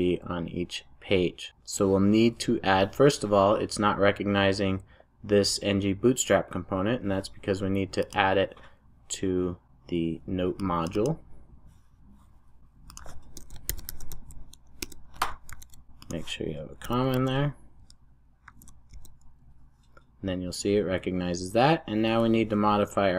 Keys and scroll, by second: 14.8 Return, 15.7 super+s, 18.4 super+e.